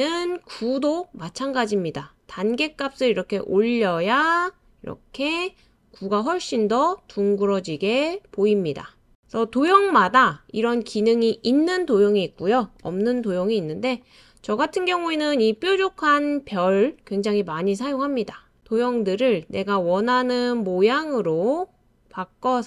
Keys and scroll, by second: 11.9 BackSpace.